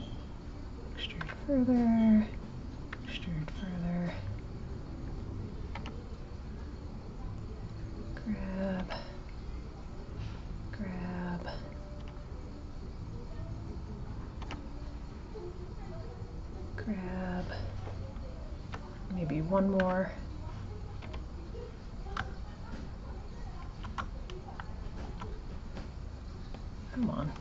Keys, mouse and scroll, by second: 4.7 click, 18.3 click, 22.9 shift+click, 24.3 shift+click.